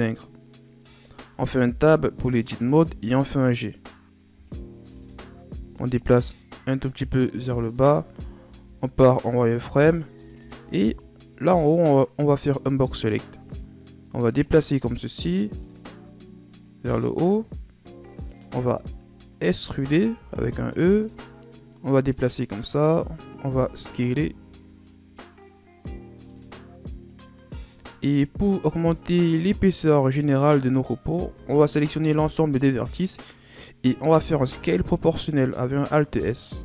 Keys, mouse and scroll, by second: 0.9-1.5 scroll down 2, 1.5 Tab, 2.7-4.8 drag, 4.8 o, 5.8-7.4 drag, 7.4-7.8 scroll down 2, 7.8-8.4 scroll up 6, 8.4 z, 9.2 right click, 9.5 b, 10.8-11.8 scroll up 4, 11.8-12.7 scroll up 2, 13.5-14.9 drag, 14.9-16.6 scroll down 2, 16.6 click, 17.6-18.5 scroll up 2, 18.5 z, 19.6 z, 20.1 e, 21.7-23.4 drag, 23.4 s, 27.5-28.7 scroll down 3, 31.3 a, 32.0 a, 34.3 alt+s.